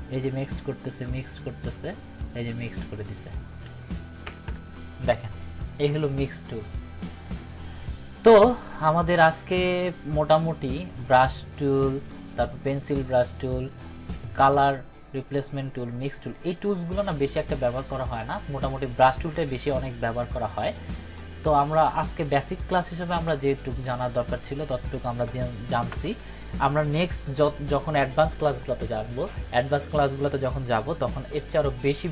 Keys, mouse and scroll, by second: 4.2 ctrl+-, 8.6-9.5 drag, 23.7 click.